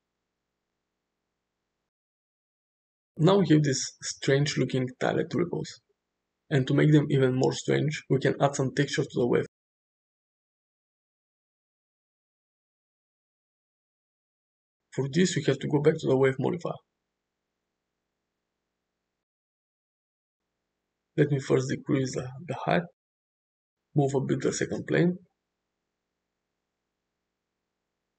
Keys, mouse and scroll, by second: 0.9-2.1 middle drag, 2.1 space, 3.9-6.6 middle drag, 7.2 space, 7.9 click, 9.2-11.5 middle drag, 12.1 shift+middle drag, 12.5-14.1 middle drag, 14.4 click, 16.0 click, 17.8 click, 21.0 middle click, 21.0 scroll up 1, 21.3 shift+middle click, 22.0 click, 22.6 click, 23.5-24.6 drag, 24.0 BackSpace, 24.3 BackSpace, 24.8 click, 25.8-26.4 middle drag, 25.9 space, 26.6-27.3 middle drag, 27.5 middle click.